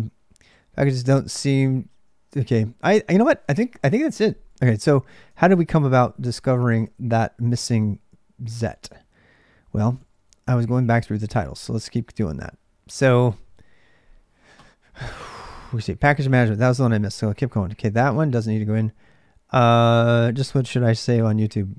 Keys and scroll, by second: 0.0-21.7 typing, 7.4 ctrl+a, 7.6 ctrl+a.